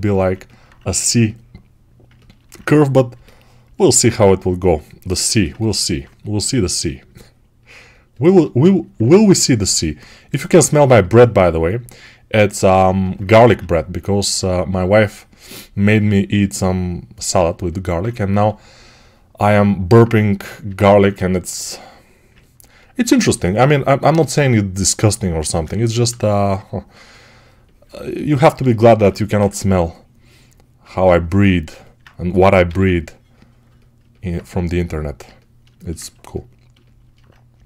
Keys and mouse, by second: 13.1 1, 13.4-31.2 ctrl+right drag, 18.2 g, 23.9 r, 25.7 ctrl+r, 29.3 2, 31.2-32.3 drag, 32.3-37.6 right drag, 32.5 g.